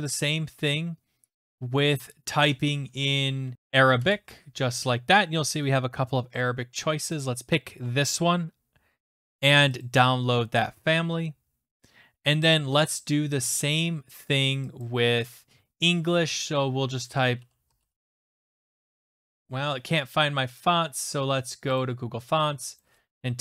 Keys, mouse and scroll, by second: 0.1 click, 2.1 click, 3.5 typing, 4.0 Return, 7.3 click, 9.9 click, 12.6 click, 13.6 click, 14.8 click, 16.9-18.3 typing, 21.8 click, 22.8 click.